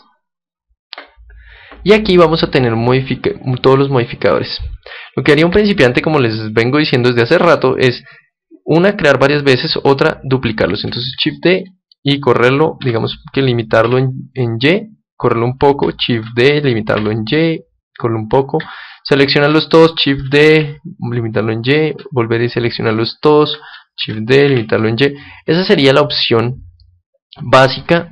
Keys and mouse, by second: 0.9-4.0 drag, 6.4-9.0 middle drag, 11.1 shift+d, 15.4-17.2 drag, 16.1 shift+d, 17.9-19.8 drag, 18.7-20.9 right drag, 20.0 shift+d, 21.7-23.5 drag, 22.4-25.0 right drag, 23.9 shift+d, 25.7-27.6 drag, 26.7-28.1 middle drag.